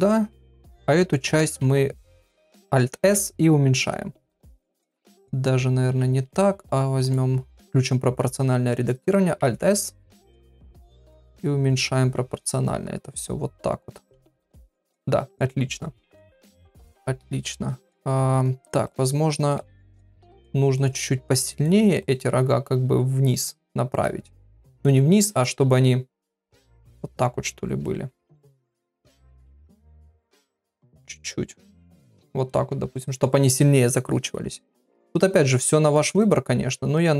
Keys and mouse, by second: 0.7 click, 1.1 shift+middle click, 2.9 alt+s, 5.8 ctrl+z, 7.0 click, 9.4 alt+s, 16.0 click, 18.8 click, 19.7 g, 20.7 click, 21.0 g, 24.1 g, 25.3 click, 25.4 g, 29.9 click, 30.6-32.4 drag, 32.9 shift+middle click, 35.3 click, 36.9 click.